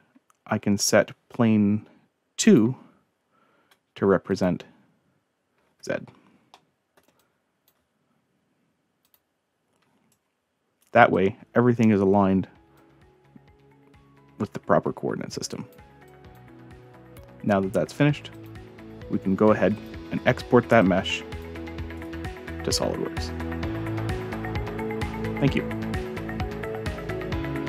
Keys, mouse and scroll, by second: 2.5 click, 4.3 click, 6.5-7.0 middle drag, 7.2-7.7 drag, 9.0 click, 10.1-10.8 right drag, 11.1-11.8 drag, 12.0-12.7 scroll down 2, 12.8-15.7 drag, 16.1-16.4 drag, 18.3 click, 19.7 click, 20.8-21.4 drag, 21.9 right click, 27.3 click.